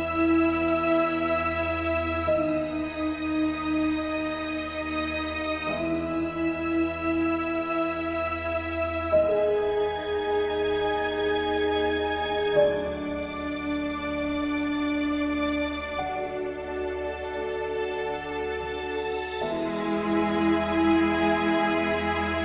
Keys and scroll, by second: 0.2 ctrl+alt+shift+e.